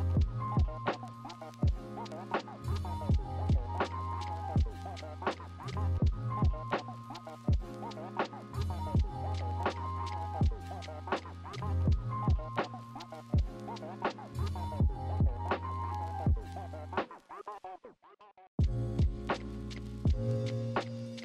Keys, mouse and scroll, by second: 1.7 ctrl+=, 2.4 b, 3.2 b, 7.5 ctrl+z, 7.7 ctrl+=, 8.1 ctrl+z, 11.3 ctrl+z, 12.7 ctrl+z, 14.5 ctrl+z, 18.8 ctrl+-, 19.0 ctrl+=, 21.1 ctrl+-.